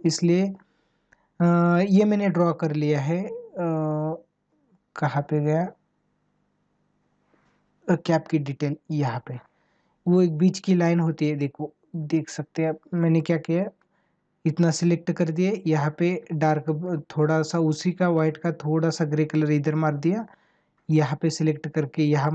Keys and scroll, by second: 12.0 ctrl+=, 13.0 space.